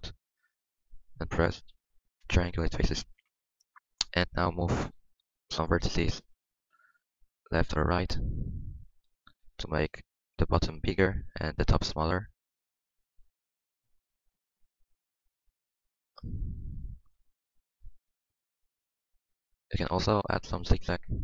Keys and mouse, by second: 1.0 ctrl+f, 3.2 Tab, 4.1 Tab, 6.9-9.3 middle drag, 9.3 click, 10.1-11.6 middle drag, 11.6 click, 12.3-13.6 middle drag, 13.6 click, 14.7-15.9 middle drag, 16.1-17.8 middle drag, 19.0-20.4 middle drag.